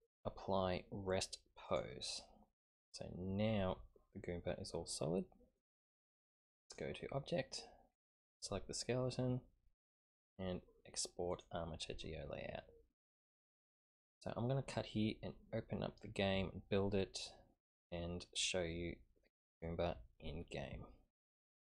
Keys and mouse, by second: 4.7 typing, 5.5-6.8 drag, 7.9 click, 11.3 click, 11.5 typing.